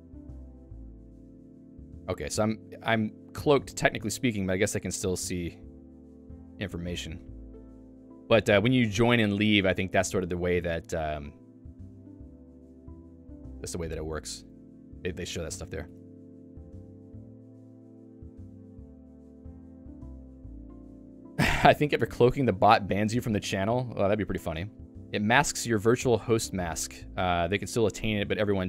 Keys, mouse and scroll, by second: 22.2 click, 24.7 j.